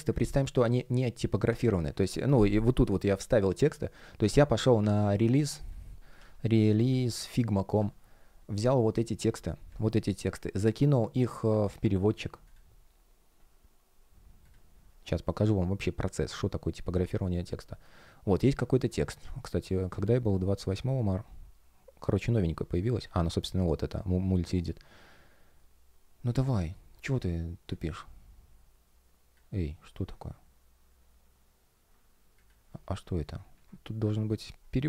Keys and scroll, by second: 7.2 Return, 11.6 super+c.